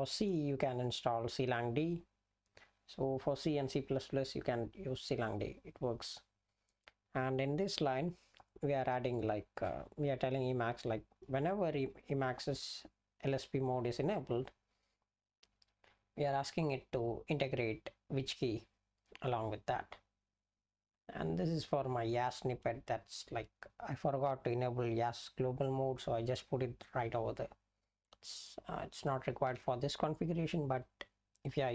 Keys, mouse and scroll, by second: 9.6 click, 11.2 click, 29.3 Down, 29.5 Down.